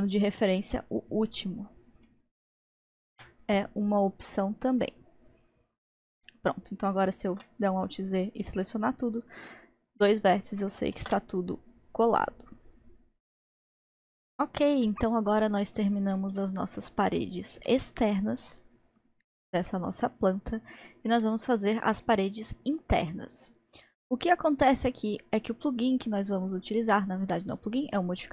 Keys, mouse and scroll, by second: 0.9 click, 2.2 shift+click, 3.2 m, 5.8-7.6 middle drag, 7.6 alt+z, 7.7 click, 11.0 alt+z, 12.2 click, 12.7-13.1 scroll down 1, 14.2 Tab, 14.8-17.2 middle drag, 17.2-17.7 scroll down 2, 17.7-20.7 middle drag, 21.2-24.4 middle drag, 24.1-24.7 scroll up 2, 24.7-28.3 middle drag.